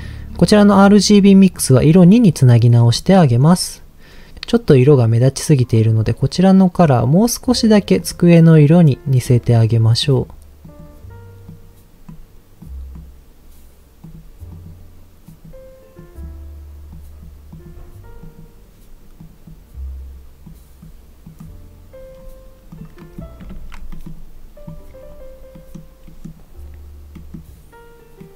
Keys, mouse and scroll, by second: 0.0-0.4 scroll up 2, 1.6 click, 3.0 middle click, 3.2-4.0 scroll up 3, 5.8 click, 22.1-22.8 scroll down 3, 22.7 click, 23.0 middle click, 23.5 ctrl+s, 23.9 middle click, 25.5 middle click, 26.0 middle click, 27.1 middle click, 28.2 middle click.